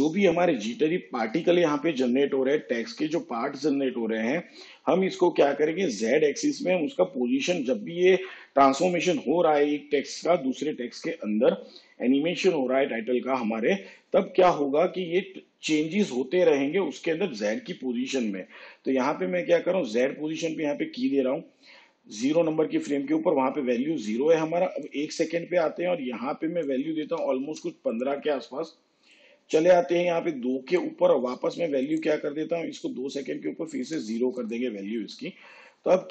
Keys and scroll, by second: 27.1 1, 27.5 5, 33.9 0.